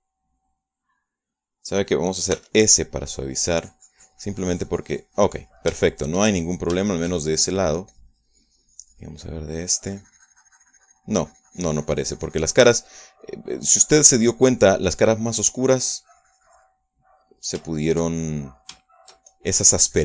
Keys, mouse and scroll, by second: 0.8-3.0 middle drag, 3.4 s, 4.0-6.8 drag, 6.8-8.8 shift+middle drag, 8.9-14.4 shift+drag, 10.3 middle click, 13.8 middle click, 14.6-18.4 drag, 17.9 middle click, 18.8 shift+middle click, 19.5 shift+middle click.